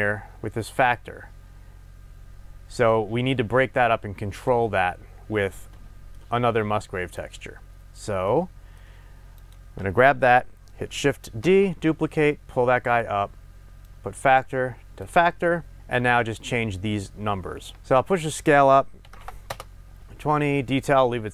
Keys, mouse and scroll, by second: 5.8-7.1 middle drag, 7.1 click, 8.3-9.3 middle drag, 9.3 click, 11.5 shift+d, 13.0 click, 13.8-21.3 drag, 19.5 Return.